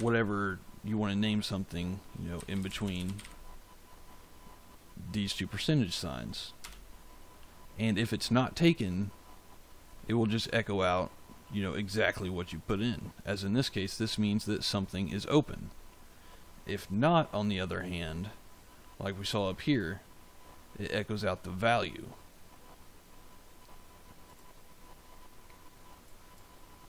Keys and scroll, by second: 2.0-3.6 typing, 6.5 Return.